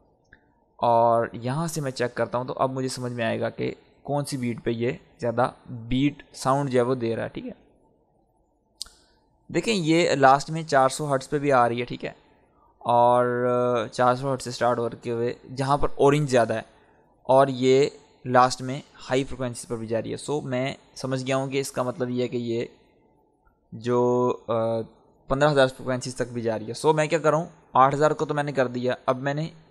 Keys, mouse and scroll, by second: 0.9-2.2 drag, 2.2 scroll down 1, 4.1 click, 4.8-5.4 scroll down 1, 6.2-10.4 drag, 12.1-19.5 drag, 22.1 click, 29.0-29.7 drag.